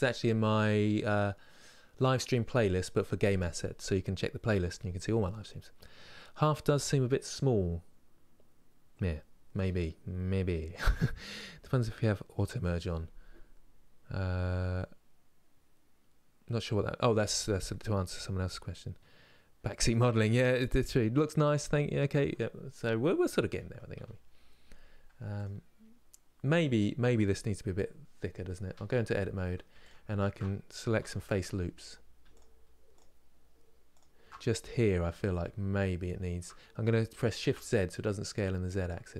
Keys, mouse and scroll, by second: 23.2 KP_1, 25.1 click, 25.6 scroll up 1, 28.4 Tab, 29.5 alt+shift+click, 30.7 3, 31.4 alt+click, 34.7 s.